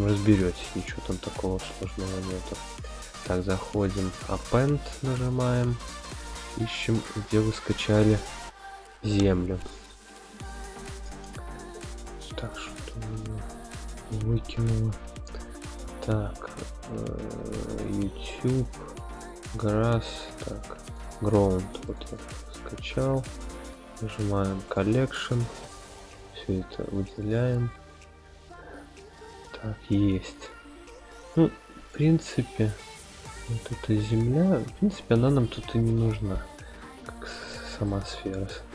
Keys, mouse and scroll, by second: 1.2-1.7 shift+middle drag, 3.0-4.0 drag, 12.5-13.5 drag, 31.9 click, 32.7 click, 34.4 click, 36.0 x, 37.8-38.7 middle drag.